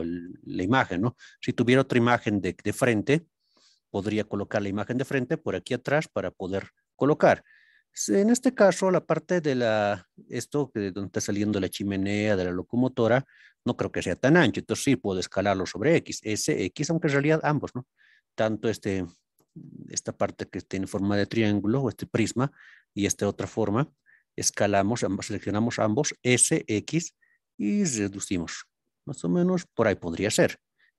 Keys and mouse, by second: 2.8-3.6 middle drag, 7.2-8.4 middle drag, 13.6 middle click, 26.5 x, 29.7 drag.